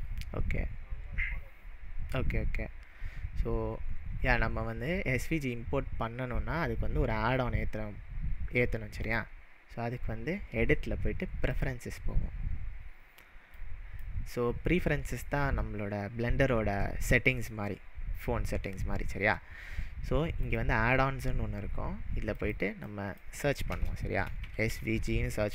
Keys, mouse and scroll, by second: 9.0-12.0 drag, 20.4-23.4 drag, 24.2-25.4 typing.